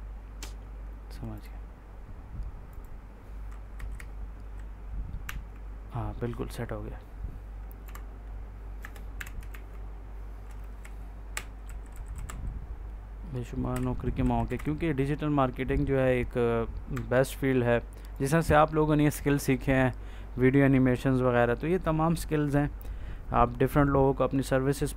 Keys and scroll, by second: 3.6 Right, 5.1 e, 7.7 i, 8.7 BackSpace, 9.0 o, 9.4 ctrl+s, 10.7 Right, 13.6 Right, 14.4 Down, 16.8 F4, 18.3 ctrl+s.